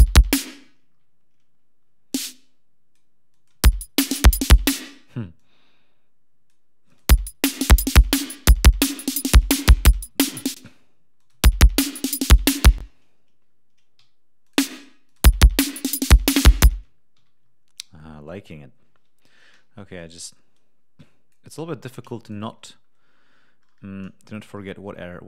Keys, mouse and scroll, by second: 0.3 space, 2.0-3.0 drag, 3.2 click, 3.4 space, 4.6 space, 5.3-6.6 drag, 6.8 click, 6.9 space, 9.0 ctrl+scroll down 2, 9.6 ctrl+g, 10.4 ctrl+space, 10.5 ctrl+scroll up 2, 11.1 ctrl+click, 11.2 ctrl+space, 12.7 space, 13.9 d, 14.3 click, 15.0 click, 15.1 space, 16.6 space, 17.1 f, 17.3 ctrl+scroll down 2, 19.4 g, 19.9-21.4 drag, 21.5 Delete, 22.1 click, 22.4-22.9 scroll up 2, 24.6 ctrl+scroll down 2.